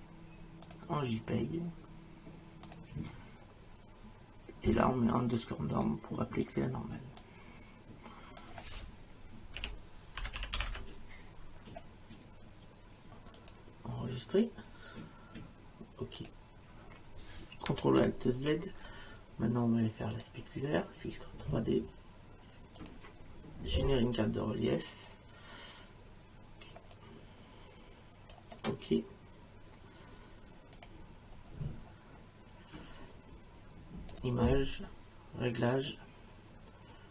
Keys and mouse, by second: 0.7 click, 2.7 click, 5.4 click, 6.4 click, 9.6-11.2 typing, 13.4 click, 16.2 click, 18.4 ctrl+alt+z, 20.2 click, 22.8 click, 27.0 click, 30.8 click, 34.1 click.